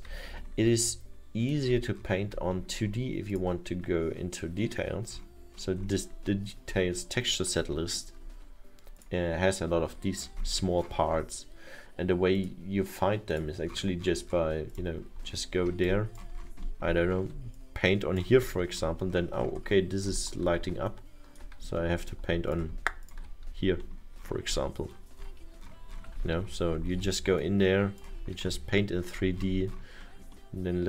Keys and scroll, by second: 0.6 F1, 30.4 ctrl+z.